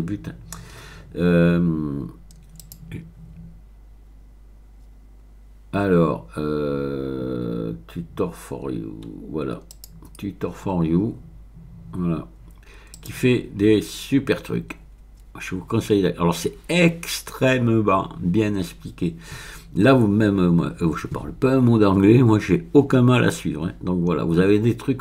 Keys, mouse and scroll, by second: 1.4-2.2 scroll down 1, 2.6 click, 3.6-4.7 scroll down 3, 8.7-9.4 scroll down 1, 9.7 click, 12.1-12.8 scroll down 2, 12.9 click, 13.9-15.7 scroll down 2, 16.2-22.7 scroll down 14, 23.6-24.7 scroll down 3.